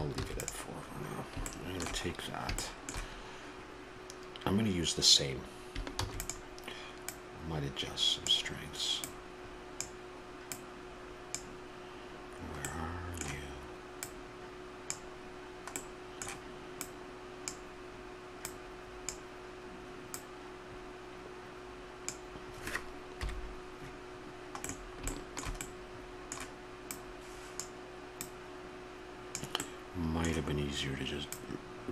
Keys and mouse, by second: 1.0 ctrl+s, 31.3-31.9 middle drag.